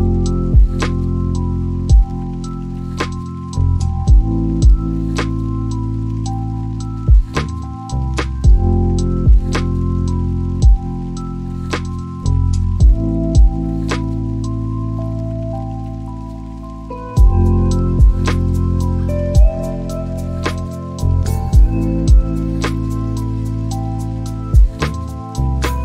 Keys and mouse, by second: 6.1 click, 7.7-10.0 drag, 11.6 drag, 15.3 g, 22.4 click.